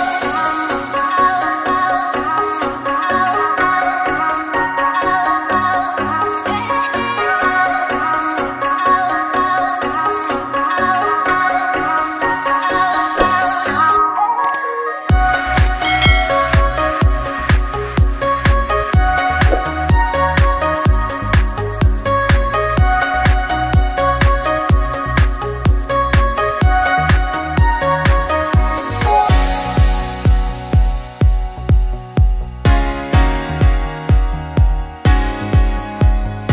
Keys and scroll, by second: 14.2 BackSpace, 18.4 ctrl+s, 24.8 Return.